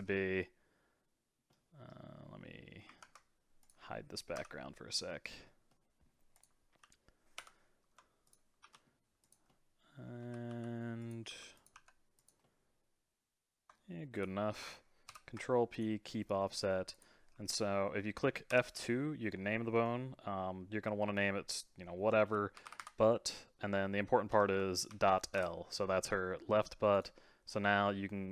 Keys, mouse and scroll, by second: 0.1-2.4 middle drag, 2.4-3.0 scroll down 2, 3.0 ctrl+Tab, 3.6 click, 4.4 h, 4.6-5.4 middle drag, 5.4 scroll up 2, 5.7 middle click, 6.3 click, 6.8 g, 7.9 Tab, 8.2 click, 8.6 g, 9.5 middle click, 10.2 r, 11.3 g, 11.7 s, 12.4-14.1 middle drag, 14.1 shift+click, 15.1 ctrl+p, 16.1 middle click, 16.9 click, 18.5 F2, 22.8 t, 26.9-28.3 right drag.